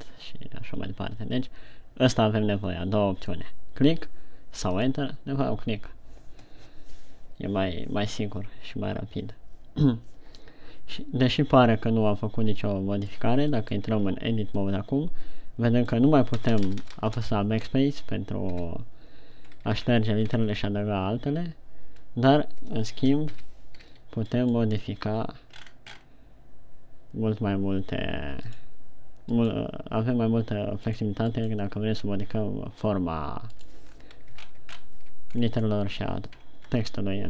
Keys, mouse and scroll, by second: 11.8 middle click, 14.0 middle click, 14.6 Tab, 15.2 middle click, 16.8-17.6 typing, 19.0 KP_1, 20.0-20.7 scroll down 3, 20.7 scroll up 1, 22.4 middle click, 22.4 scroll up 1, 24.0 KP_1, 24.5 o, 25.0 right click, 29.9 right click, 31.9 right click, 34.5-34.8 scroll down 3, 34.8 shift+scroll up 3, 35.7 ctrl+scroll down 3, 36.8 ctrl+scroll up 1.